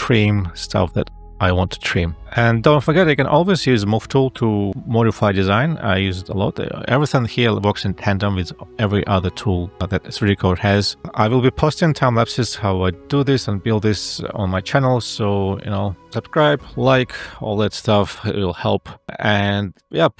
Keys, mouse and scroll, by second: 6.5 ctrl+z.